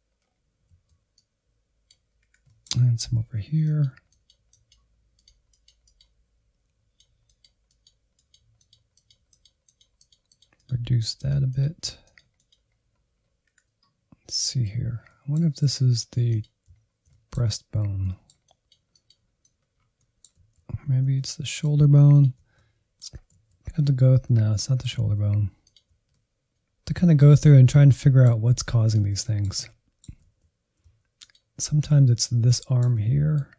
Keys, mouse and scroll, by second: 1.1 scroll down 1, 1.2 middle click, 1.4 Insert, 1.6 middle click, 2.1 Insert, 2.2 middle click, 2.4 scroll up 1, 2.6-3.6 drag, 3.6 scroll down 1, 3.9 ctrl+click, 4.2 scroll up 2, 4.4-6.9 drag, 6.9-7.6 scroll down 2, 7.0 Insert, 7.1 middle click, 7.6 middle click, 8.1 click, 8.6-9.1 scroll up 5, 8.7 Insert, 8.8 middle click, 9.1 click, 9.7 scroll down 1, 9.9-12.6 drag, 12.6 middle click, 13.2 Right, 13.3 Right, 13.7 click, 14.4 middle click, 14.6 alt+z, 15.2 ctrl+click, 15.4 middle click, 15.8 alt+z, 16.0 middle click, 16.2-17.4 drag, 17.4 middle click, 17.7-19.5 drag, 19.5 scroll down 4, 19.7 middle click, 20.0 alt+z, 20.3 middle click, 20.9 ctrl+click, 21.3 alt+z, 21.5 scroll up 1, 21.7 middle click, 22.1 alt+z, 22.6 ctrl+click, 22.7 middle click, 23.2 alt+z, 23.3 scroll up 2, 23.6-26.2 drag, 26.2 middle click, 26.4 click, 26.8 middle click, 27.2 scroll down 1, 27.4 middle click, 28.0 click, 28.4 shift+middle click, 29.2 alt+z, 30.0 ctrl+click, 30.7 shift+middle click, 31.4 Insert, 31.7 shift+z, 32.0 Insert, 32.4-33.5 middle drag.